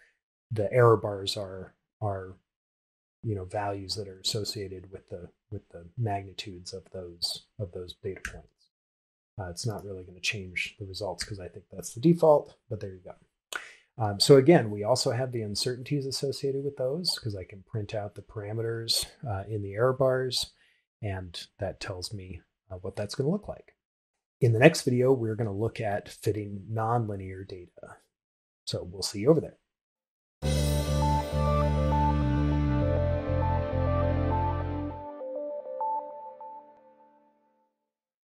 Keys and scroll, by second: 7.7 shift+Return, 10.7 shift+Return.